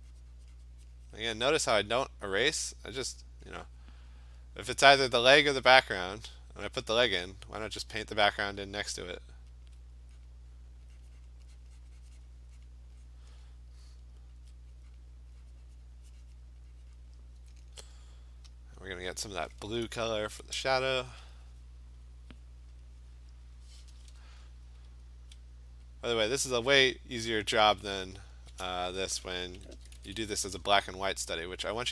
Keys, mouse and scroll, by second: 1.6 click, 3.0 alt+click, 4.0 click, 4.3 click, 4.4 alt+click, 6.9 alt+click, 9.6 alt+click, 10.3 click, 11.3 click, 11.6 click, 11.9 click, 12.1 alt+click, 12.3 click, 12.7 click, 13.1 click, 14.5 alt+click, 15.0 click, 16.4 click, 17.0 click, 18.8 alt+click, 19.3-23.9 alt+click, 20.3-21.1 typing, 21.7 click, 22.5 click, 22.7 click, 23.0 click, 23.1 click, 23.5 click, 25.0-25.3 alt+click, 25.6 click, 25.9 click, 28.3 alt+click, 29.7 [, 30.0 [, 30.2 [, 30.5 [.